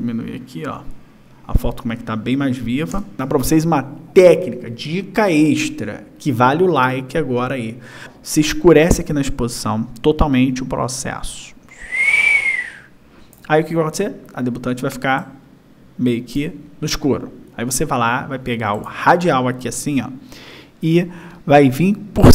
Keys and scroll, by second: 0.3 ctrl+-.